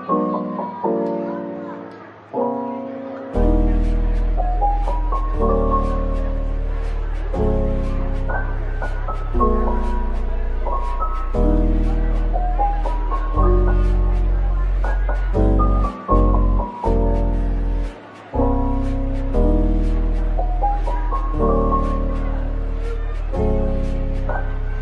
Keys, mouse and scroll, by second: 1.3-2.9 typing, 3.0 Return, 3.9 shift+click, 5.4-5.8 typing, 8.0 typing, 9.2-9.8 typing, 11.9 middle click, 15.0-15.3 typing, 16.3 right click, 16.8 typing, 18.4-18.7 typing, 20.3 ctrl+b, 23.3-23.7 scroll up 1, 24.3 Tab.